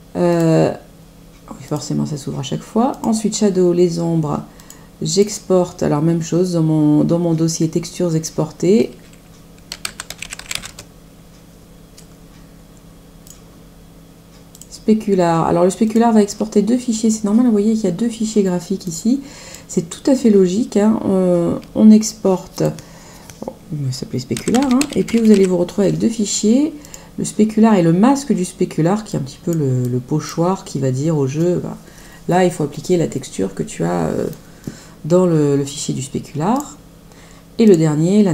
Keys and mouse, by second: 0.3 click, 1.6 click, 2.9 click, 4.5 click, 9.4-11.0 typing, 13.2 click, 14.5 click, 15.8 click, 18.8 click, 22.5 click, 24.0-25.8 typing, 26.8 click, 29.0 click, 36.5 click, 37.6 click.